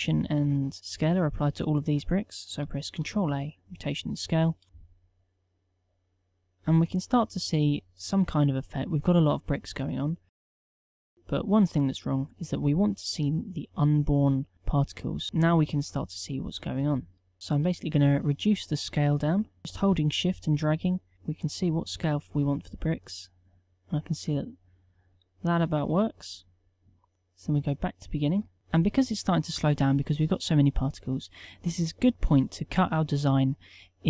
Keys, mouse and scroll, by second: 2.9 ctrl+a, 16.3 KP_1.